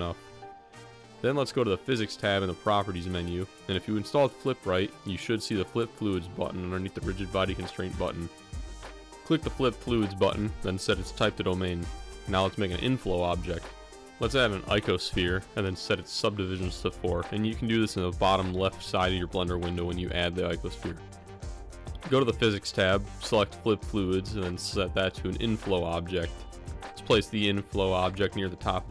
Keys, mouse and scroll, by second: 1.0 middle click, 2.6 shift+middle click, 9.3 click, 9.9-11.4 drag, 11.9-12.5 middle drag, 15.9 shift+a, 19.5 click, 20.6-22.1 drag, 25.5 g, 26.9 g.